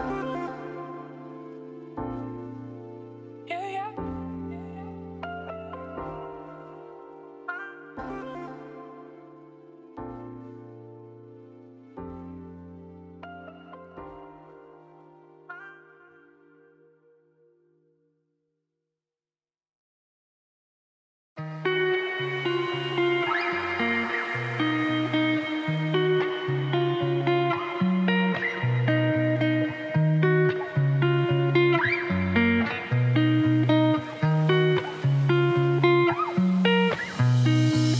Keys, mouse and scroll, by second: 0.2 x, 1.1 click, 1.3 shift+click, 1.6 shift+click, 1.8 middle click, 2.1 scroll up 1, 2.2 middle click, 2.5 ctrl+b, 7.1 Tab, 7.4 1, 8.4 click, 8.9-10.4 drag, 11.3 click, 12.3 click, 12.7 g, 17.0-18.1 drag, 18.1-19.3 middle drag, 20.2-21.4 scroll down 1, 24.2 middle click, 24.9 scroll down 7, 25.1-26.3 middle drag, 26.3 scroll up 1, 26.7 Tab, 27.0-28.2 middle drag, 28.2 a, 28.3 a, 28.7 click, 29.6 middle click, 29.9 scroll up 1, 30.0 middle click, 30.6 g, 33.5 scroll up 1, 33.9 scroll down 1, 34.8 ctrl+KP_Subtract, 35.1 ctrl+KP_Subtract, 35.9 g, 37.7 ctrl+KP_Subtract.